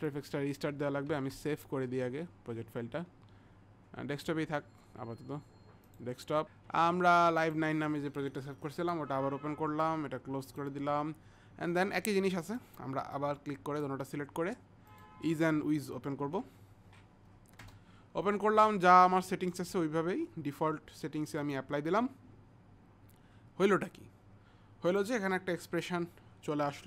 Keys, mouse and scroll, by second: 1.3 ctrl+s, 1.3 click, 5.9 click, 7.5 click, 10.5 click, 13.2 click, 17.6 Return, 21.4 click, 24.9 click.